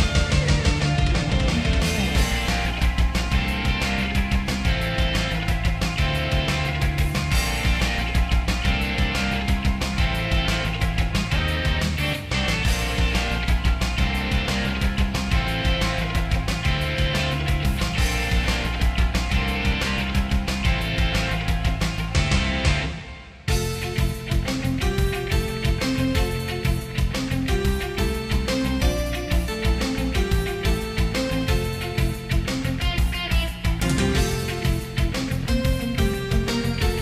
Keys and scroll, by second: 5.6 ctrl+z, 7.9 ctrl+z, 8.5 ctrl+z, 9.3 ctrl+z, 15.7 ctrl+z, 19.7 ctrl+z, 24.0 ctrl+s, 26.1 ctrl+z, 28.1 ctrl+z, 29.2 ctrl+z, 30.2 ctrl+z, 30.5 ctrl+z, 31.2 ctrl+z, 31.9 ctrl+z, 33.2 ctrl+z, 34.4 ctrl+z, 36.8 ctrl+z.